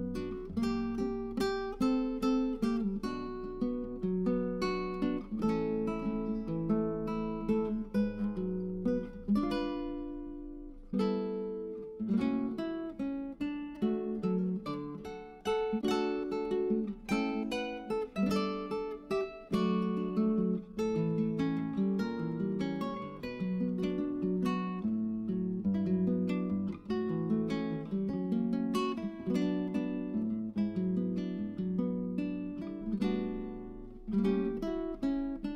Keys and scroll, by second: 14.4-16.1 typing, 29.4-30.6 typing.